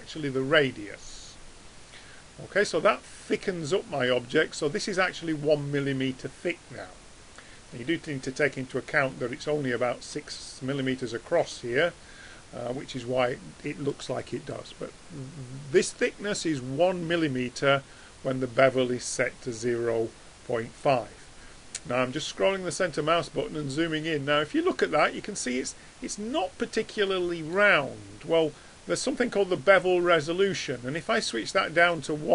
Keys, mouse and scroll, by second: 2.7-3.1 middle drag, 24.0-24.6 middle drag, 24.8 middle drag, 27.1 middle drag, 30.5 middle click.